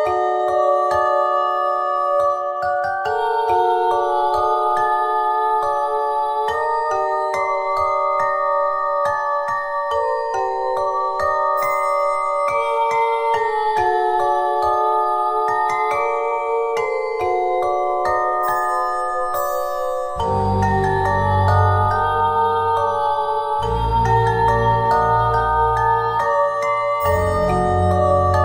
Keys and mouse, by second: 1.5 click, 2.6 c, 3.5 click, 4.3 c, 4.7-7.8 drag, 8.6 click, 11.0 middle click, 11.9 z, 12.2 middle click, 14.9 e, 16.5 s, 18.4 f, 19.0 click, 19.3 Tab, 22.2 Tab, 22.6-25.1 drag, 25.6 ctrl+z, 27.2 s.